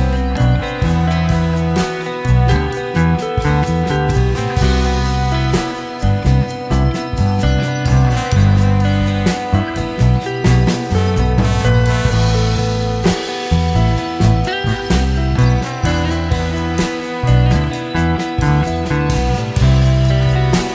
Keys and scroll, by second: 0.7 m, 0.8 space, 2.1 Escape, 3.8 Escape, 4.5 Escape, 5.3 Escape, 6.4 m, 6.5 space, 6.9 Escape, 7.1 m, 7.1 space, 8.0 Escape, 8.9 m, 9.1 space, 11.0 shift+Escape, 12.2 m, 12.3 space, 13.6 Escape, 14.3 m, 14.4 space, 15.6 Escape, 16.4 m, 16.4 space, 17.8 space, 18.3 Escape, 18.9 m, 19.0 space, 20.0 Escape, 20.1 Escape, 20.1 Escape.